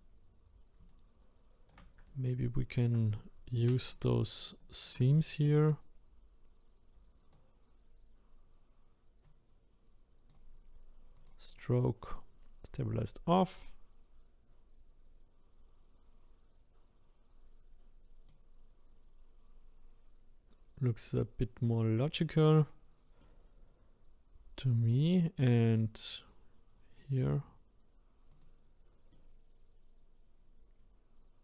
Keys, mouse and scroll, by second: 0.9-9.2 shift+right drag, 9.2-16.3 drag, 23.2-27.2 middle drag, 28.3 click, 29.1-31.4 middle drag.